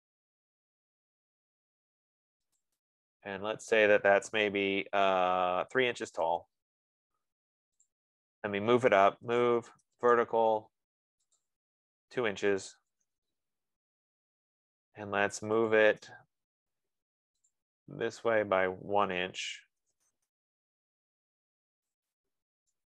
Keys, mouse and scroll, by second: 3.1 click, 6.0-6.9 typing, 8.4 click, 9.3-10.7 typing, 11.7 click, 13.0-13.9 typing, 15.7-17.4 typing, 17.9 click, 19.5-20.7 typing, 22.3 shift+click.